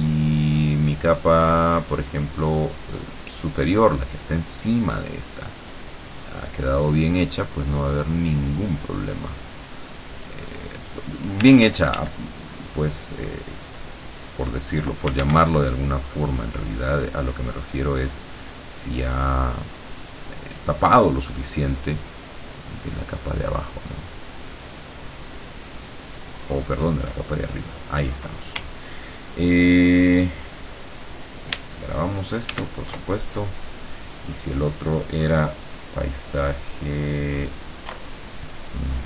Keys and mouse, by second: 4.1 click, 4.7-10.8 drag, 11.4 d, 12.3-15.1 drag, 15.3 ctrl+z, 15.7-20.3 ctrl+drag, 21.5-26.8 drag, 32.5 ctrl+shift+s, 33.4 ctrl+shift+click, 37.3 click, 38.9 click.